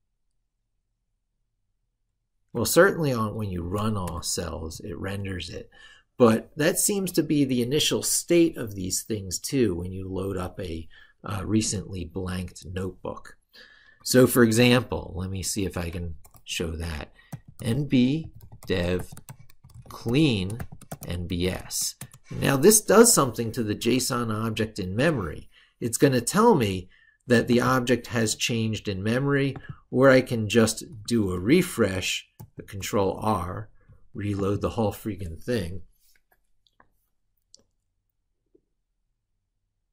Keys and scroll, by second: 3.3 ctrl+shift+e, 14.4 ctrl+super+Right, 24.1 ctrl+super+Left, 32.1 ctrl+r.